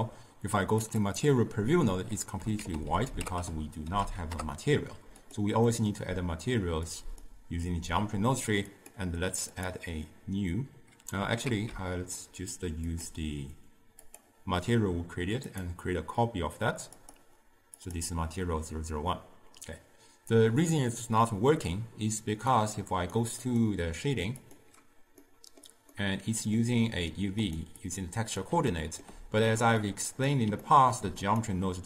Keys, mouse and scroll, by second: 1.2 z, 4.4 ctrl+a, 9.8-11.6 drag, 11.6 ctrl+z, 13.2-27.9 drag, 31.5 click.